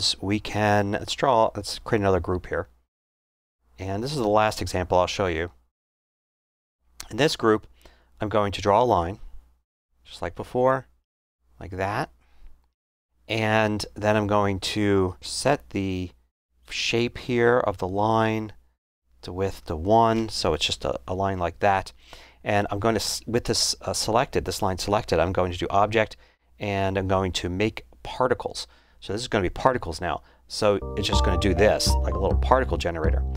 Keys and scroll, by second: 19.8 1, 20.1 Return.